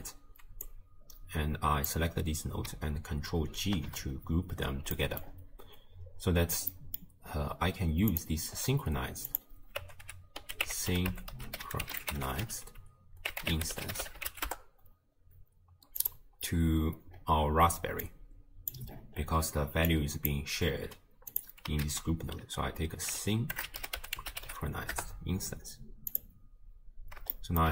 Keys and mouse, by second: 0.7-2.0 drag, 3.6 ctrl+g, 5.0 click, 6.8 click, 8.1 click, 9.3-14.6 drag, 16.0 click, 18.1 click, 19.9 click, 21.3 click, 21.8 ctrl+a, 27.5 shift+click.